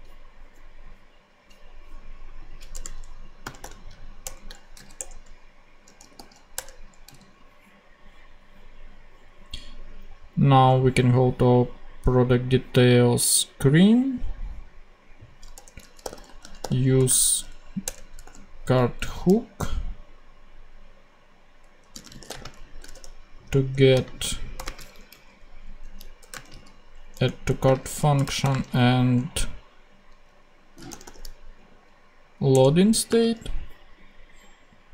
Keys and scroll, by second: 2.7 Return, 3.1-4.7 typing, 4.2 Return, 4.9 Return, 5.8 a, 6.5 Return, 7.0 ,, 15.5 Return, 15.7-18.2 typing, 17.8 shift+Return, 19.4 super+Left, 21.6-24.6 typing, 25.0 alt+Left, 25.7 alt+a, 26.3 space, 26.4 a, 27.1 Return, 27.7 space, 28.1 BackSpace, 28.3 ,, 28.7 space, 31.0 o, 32.4 Return, 33.0 space.